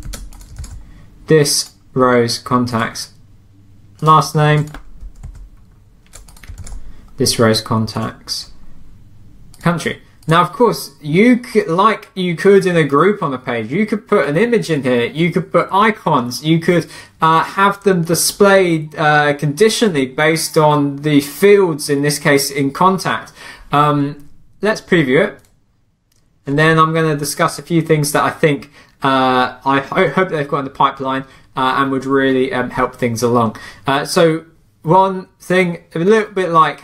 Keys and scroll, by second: 0.0 super+c, 0.6 super+v, 5.2 super+c, 6.6 super+v.